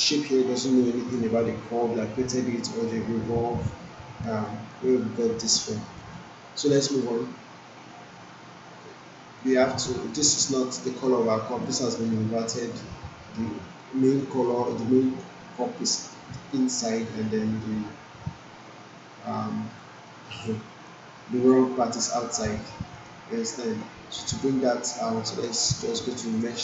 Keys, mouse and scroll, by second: 4.4 alt+middle click, 5.0 alt+click, 5.8 alt+middle click, 6.1-6.8 alt+click, 8.8-9.4 alt+drag, 11.2-11.8 alt+drag, 13.8-14.4 alt+right click, 14.4 alt+middle click, 15.0 alt+right click, 15.6-16.2 alt+drag, 20.0 alt+middle click, 20.6 alt+right click, 22.3 alt+click, 22.9 alt+middle click, 26.4 click.